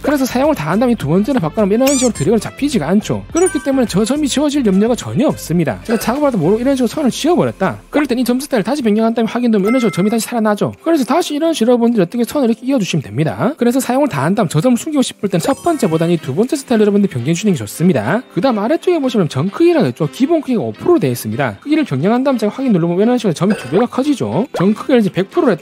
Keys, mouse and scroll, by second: 1.7 click, 2.3 click, 2.6 click, 6.6 e, 6.8 right click, 7.0 click, 7.2 click, 7.4 right click, 9.3 click, 10.0 click, 10.8 right click, 11.6 shift+click, 12.2 shift+right click, 12.6 d, 12.9 click, 13.1 right click, 16.9 click, 21.5 click, 22.0 1, 23.6 click, 24.9 click, 25.2 1.